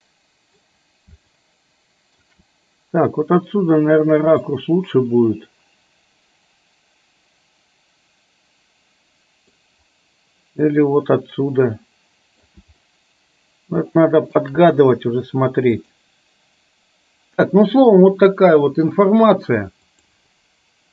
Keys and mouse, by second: 0.0 middle click, 1.4-2.3 shift+middle drag, 4.6-9.6 middle drag, 10.8-12.5 middle drag, 13.0-14.5 shift+middle drag.